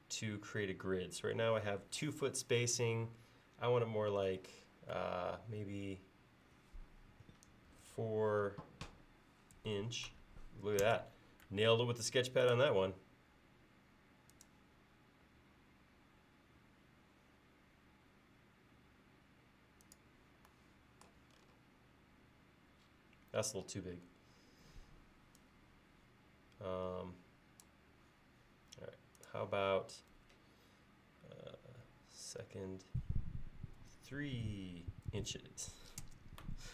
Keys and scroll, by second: 7.8 4, 9.6 shift+', 10.9 Return, 33.8 3.